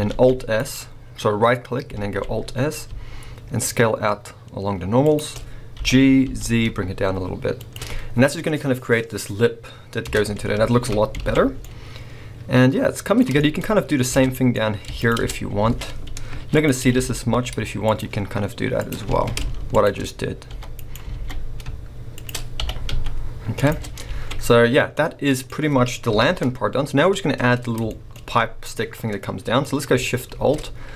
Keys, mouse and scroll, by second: 0.8 right click, 2.0 alt+s, 2.2 click, 5.2 shift+click, 5.8 g, 7.7 shift+click, 8.2 scroll down 2, 10.1 Tab, 10.3 scroll down 1, 10.6 a, 11.2 alt+a, 11.5 scroll down 1, 11.6-14.1 middle drag, 13.6-14.1 scroll up 2, 14.1 click, 14.2 Tab, 14.5-14.8 scroll up 1, 14.8 Tab, 14.8 middle click, 15.0 click, 15.2 Tab, 15.5 scroll up 1, 15.7 alt+a, 16.2 ctrl+r, 17.9 click, 18.8 click, 19.0 alt+a, 19.7 alt+shift+click, 20.6 e, 20.9 right click, 21.1 alt+s, 22.3 shift+click, 22.6 g, 23.7 click, 23.8 Tab, 24.0-24.6 scroll down 3, 24.3 a, 24.9-26.2 middle drag, 26.1 KP_1, 27.9 shift+middle click, 28.2 scroll up 1, 29.2 middle click, 30.3 shift+a.